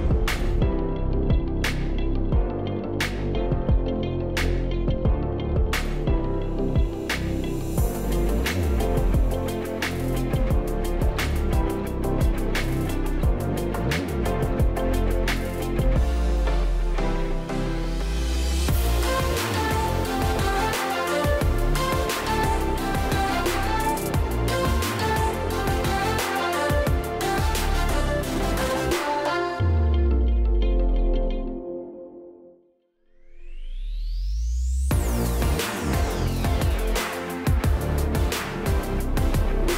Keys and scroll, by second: 2.5 space, 7.7-8.4 ctrl+space, 9.0-10.5 space, 13.6 Delete, 17.8 space, 21.2 space.